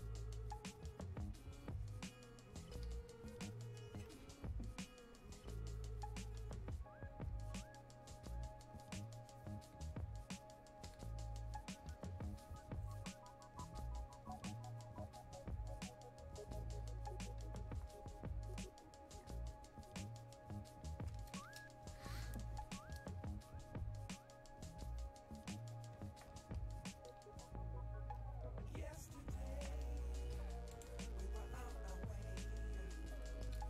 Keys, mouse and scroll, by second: 30.9 click.